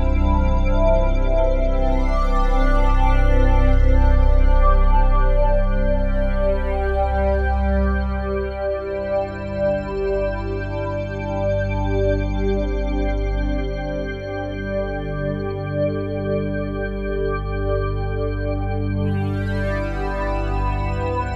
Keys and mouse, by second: 1.6-2.7 drag, 3.1 typing, 4.4 Escape, 5.0-6.0 drag, 6.0 g, 6.4 click, 7.2-8.4 typing, 9.6 click, 10.0 typing, 13.4 space, 14.0 click, 14.6 click, 16.4 typing, 17.4-19.0 drag, 20.4 typing.